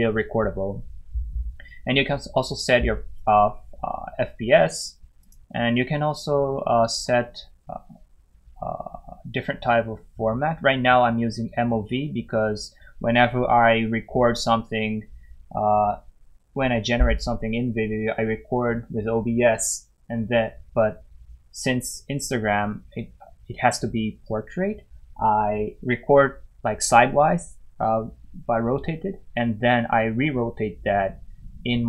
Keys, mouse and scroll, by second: 5.2 click, 6.9-9.0 scroll down 1.